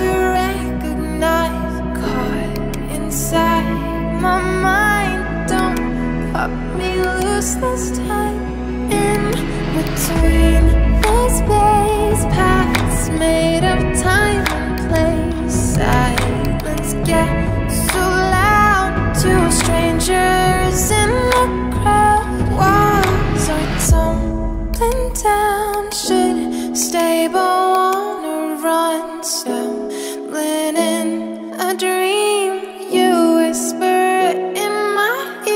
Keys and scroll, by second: 1.2 [, 3.2 ], 17.2-18.5 typing, 18.8 Return, 21.6 [, 24.3 ].